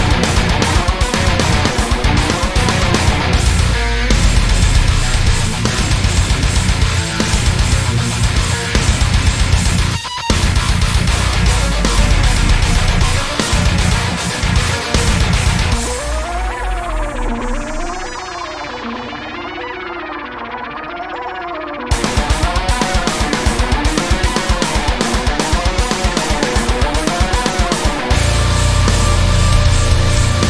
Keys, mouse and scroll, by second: 0.8 right click, 1.1-1.5 scroll down 1, 1.8 p, 2.8 Tab, 3.1-4.0 scroll down 2, 3.3-4.0 middle drag, 4.0 click, 4.4 click, 5.1 shift+click, 5.6 click, 6.1 shift+click, 6.3 shift+middle click, 7.0 shift+click, 8.3 ctrl+click, 9.2-10.0 scroll up 4, 9.4-12.1 shift+middle drag, 12.1 click, 12.2 scroll down 1, 12.4-14.9 middle drag, 12.6 z, 12.9-13.7 scroll down 2, 14.7 scroll down 1, 14.9 click, 15.2-17.0 shift+middle drag, 16.4-17.0 scroll down 1, 17.0 click, 17.8 shift+click, 18.3 click, 18.7 click, 19.1 shift+click, 19.8 shift+drag, 20.0 shift+click, 20.9 ctrl+j, 21.3 click, 21.6 z, 22.3-30.4 middle drag, 22.8 `, 23.1 scroll down 2, 26.3 `, 26.6-27.6 scroll up 2, 27.6-28.1 scroll up 1, 28.1 shift+a.